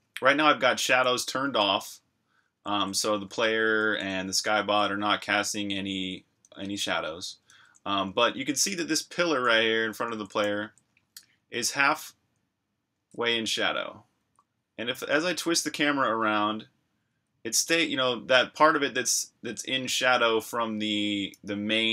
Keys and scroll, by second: 0.0-11.6 typing, 14.2-16.0 typing, 17.1 c, 19.3 c, 20.5 v, 21.3 c.